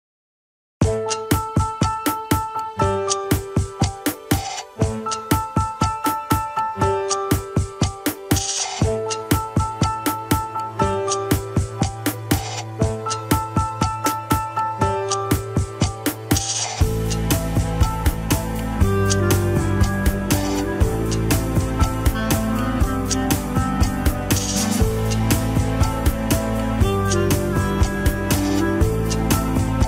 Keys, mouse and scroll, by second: 0.3 ctrl+s, 0.4 click, 0.8 shift+z, 1.3 shift+z, 1.8 click, 2.1 alt+z, 2.7-3.2 middle drag, 3.2 KP_1, 3.4 scroll up 2, 3.9 click, 5.2 click, 17.6 scroll up 1, 17.9 Tab, 18.1 scroll up 1, 18.4-19.6 shift+middle drag, 19.6 click, 20.0 middle click, 20.6 click, 20.9-21.9 middle drag, 21.9 scroll down 1, 22.1 g, 23.9-26.2 middle drag, 26.2-26.8 scroll down 3, 26.8 KP_1, 27.1-27.8 scroll up 1, 27.8-28.5 scroll up 1, 28.5 click, 28.9 l.